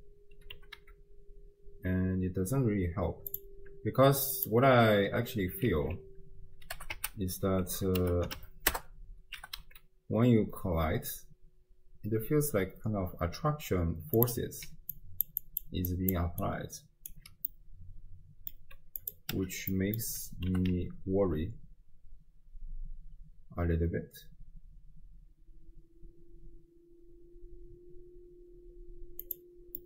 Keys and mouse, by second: 0.5 g, 4.4 click, 5.9 alt+r, 6.8 r, 9.4 g, 14.7-17.6 typing, 14.9 click, 15.4 click, 15.9 click, 16.4 click, 16.9 right click, 17.6-18.6 middle drag, 19.0 right click, 19.4 m, 19.8 click, 20.5 g.